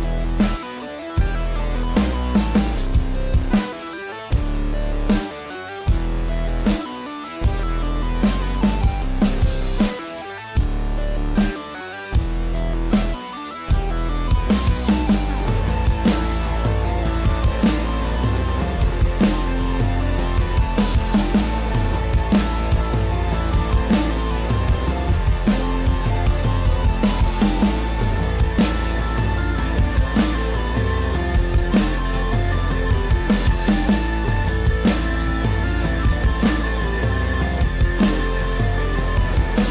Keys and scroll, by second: 18.9 ctrl+=, 19.9 ctrl+-, 37.9 space.